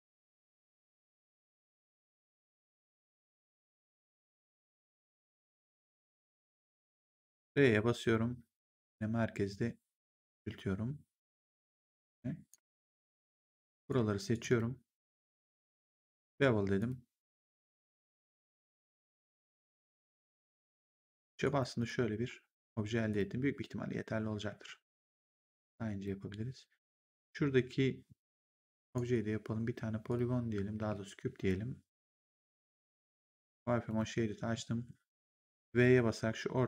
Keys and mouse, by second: 1.2 shift+click, 2.6 shift+click, 6.6 click, 7.2 r, 8.6 click, 13.6 click, 15.4 shift+click, 16.7 click, 18.0 click, 19.8 click, 21.3 right click, 21.7 click, 23.0 click, 24.4 r, 25.4 click, 28.7 click, 30.0 click, 30.7 w, 32.2 click, 33.8 click.